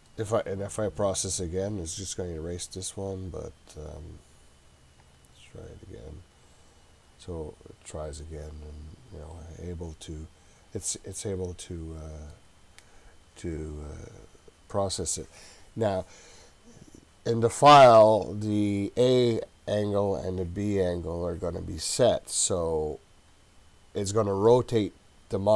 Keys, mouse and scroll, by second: 0.7-2.4 scroll up 7, 2.4-5.1 scroll up 4, 5.1 click, 9.3-12.4 middle drag.